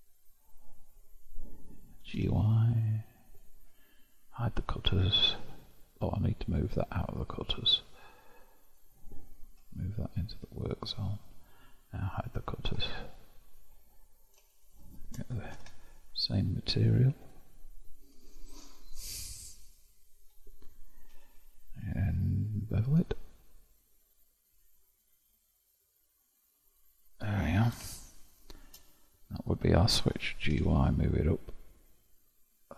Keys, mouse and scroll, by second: 4.8-6.7 drag, 8.8 click, 9.7 m, 12.3 click, 13.2-14.6 middle drag, 14.6 shift+click, 15.6 ctrl+l, 18.2-18.9 scroll up 4, 19.0 click, 19.8-21.2 scroll up 1, 21.2 q, 28.3-30.6 shift+middle drag, 30.6 g.